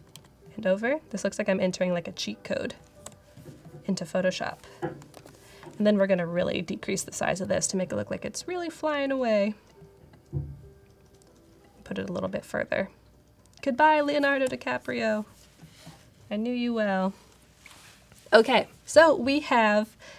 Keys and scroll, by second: 2.9 Return, 5.0 super+t, 14.3 Return.